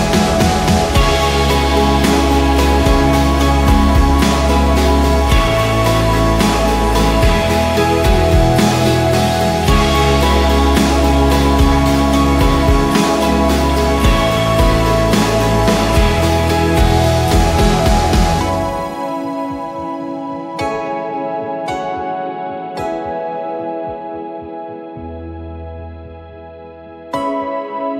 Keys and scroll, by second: 0.7 shift+Left, 0.9 shift+Left, 2.8 ctrl+g, 3.6-9.0 typing, 10.3 m, 12.8-13.7 typing, 15.5 ctrl+d, 17.6-18.6 typing, 19.5 ctrl+d, 20.7 ctrl+d, 24.4-25.8 typing, 26.0 Return, 27.8-27.9 typing.